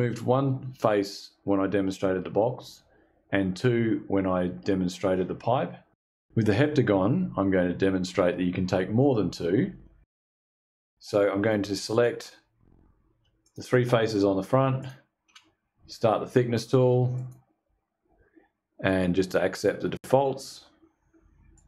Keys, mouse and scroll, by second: 11.4 click, 12.9 ctrl+click, 14.3 ctrl+click, 16.7 click, 21.0 click.